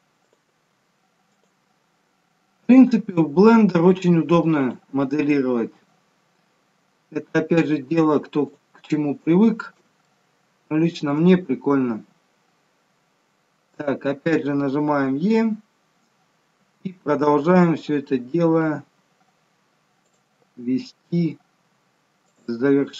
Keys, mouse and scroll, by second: 0.5 e, 2.9 e, 4.8 e, 10.0 shift+middle click, 11.9-12.2 scroll up 3, 12.9 scroll down 3, 16.6 e, 20.3 e, 22.8 e.